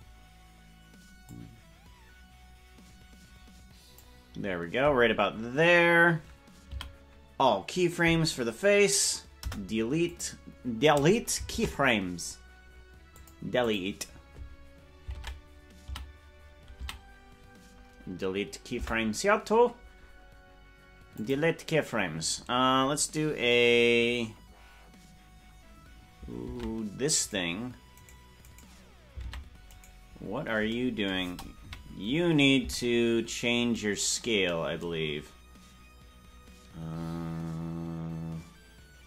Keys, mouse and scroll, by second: 1.3-4.0 drag, 11.5 Delete, 11.5 ctrl+Tab, 11.5 a, 13.1 click, 13.6 click, 15.1 ctrl+Tab, 15.8 a, 18.6 a, 18.7 Delete, 27.2 ctrl+Tab, 27.2 right click, 29.2 ctrl+Tab, 29.2 right click, 29.8 right click, 31.5 KP_Decimal, 32.6 Tab, 33.2-33.7 scroll down 5.